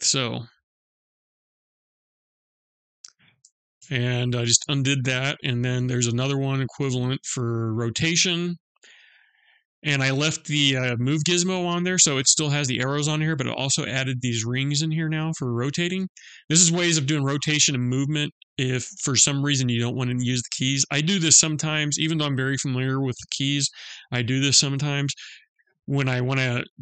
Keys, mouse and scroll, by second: 2.5 ctrl+z, 3.1 ctrl+z, 3.8 ctrl+z, 5.1 click, 14.7 click, 20.7 click.